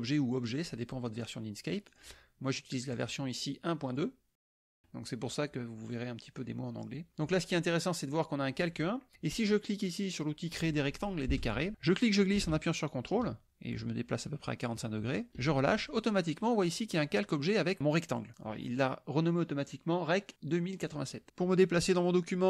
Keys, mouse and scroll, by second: 1.9 click, 2.9 click, 3.9 click, 4.7 click, 6.0 click, 11.4 click, 11.9-15.4 drag.